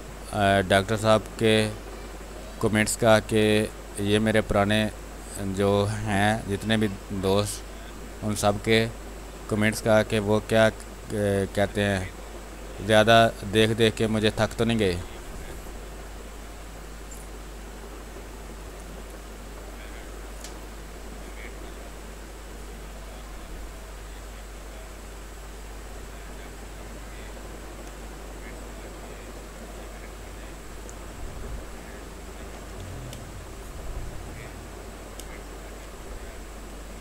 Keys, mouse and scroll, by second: 1.0 space, 1.3 click, 1.5 space, 3.0-4.4 drag, 4.4-6.0 drag, 6.0-7.7 drag, 7.7-9.4 drag, 9.4 space, 9.6 click, 11.1-12.5 drag, 12.5 space, 12.7 click, 13.0 space, 13.7 alt+click, 14.0 click, 14.3 click, 14.9 ctrl+click, 15.9-18.5 drag, 18.5 space, 18.6 click, 19.1 space, 19.8-21.6 drag, 21.6 space, 22.0 click, 22.3 space, 25.1-27.8 drag, 27.8 space, 28.1 alt+click, 29.5 click, 29.7-31.4 drag, 32.3 ctrl+d, 33.0 space, 33.5 click, 33.8 space, 34.7 w, 35.1 space, 35.4 ctrl+click, 36.6 space.